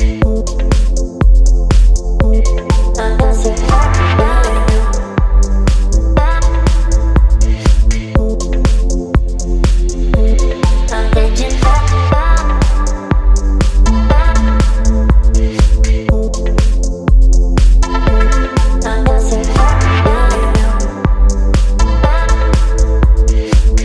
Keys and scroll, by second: 11.2 BackSpace, 20.7 v, 22.2 Up, 22.7 Up.